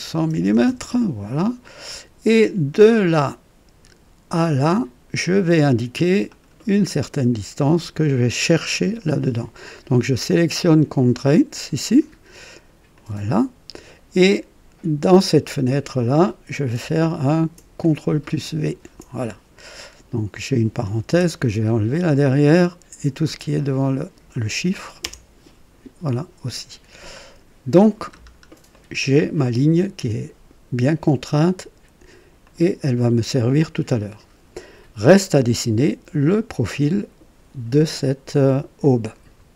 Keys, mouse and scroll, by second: 0.0 KP_1, 0.2 KP_0, 0.4 KP_0, 0.6 Return, 2.9 click, 4.3 click, 6.3 click, 8.8 click, 12.9 click, 15.1 click, 17.8 ctrl+click, 18.6 ctrl+v, 18.6 ctrl+v, 21.1 BackSpace, 23.2-24.4 drag, 25.0 BackSpace, 27.1 click, 28.1-28.4 scroll up 2, 28.7 right click, 32.4 click.